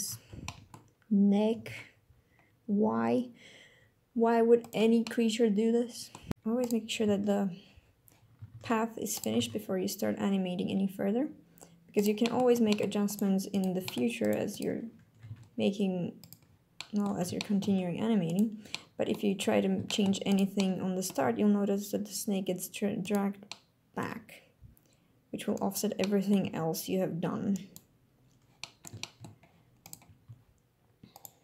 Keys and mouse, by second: 0.1-0.4 shift+drag, 1.9 alt+g, 3.1 g, 5.0-5.8 drag, 6.7 click, 8.6 ctrl+Tab, 9.4 Tab, 12.0 click, 12.3 click, 12.7 g, 12.7 click, 13.1 click, 13.9 g, 13.9 click, 14.2 click, 15.2 r, 15.3 z, 16.2 click, 16.8 middle click, 16.9 click, 17.1 right click, 17.4 shift+middle click, 17.5 shift+click, 17.7 right click, 18.3 click, 18.7 click, 19.9 shift+click, 20.3 click, 20.6 click, 21.2 g, 23.6 click, 24.0 g, 26.0 click, 26.5 g, 27.6 click, 28.6 click, 29.0 shift+click, 29.9 click, 30.3 g, 31.2 click.